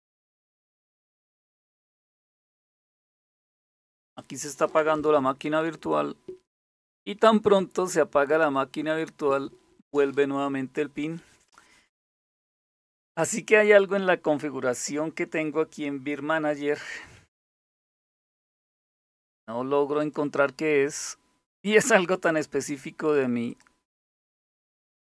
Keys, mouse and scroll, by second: 19.6 click, 22.3 click.